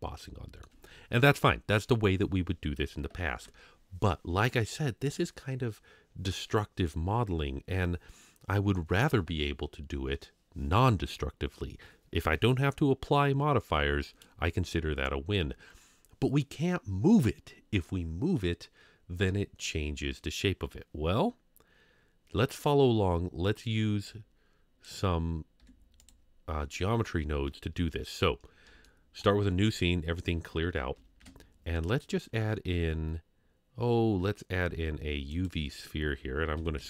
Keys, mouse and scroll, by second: 3.3 KP_Divide, 24.1-24.8 drag, 25.6 x, 27.6 scroll down 2, 28.8-29.2 shift+middle drag, 31.2 shift+a, 36.6 s.